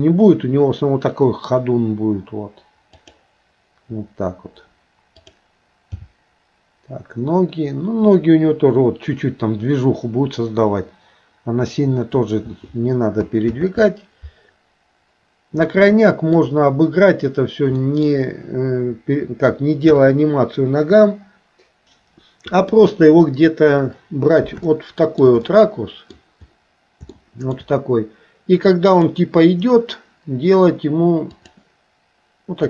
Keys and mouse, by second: 6.0 g, 13.6 ctrl+z, 15.7 middle click, 17.8 middle click, 19.9 KP_3, 24.7 shift+middle click, 25.4 middle click, 27.2 shift+middle click, 31.4 click.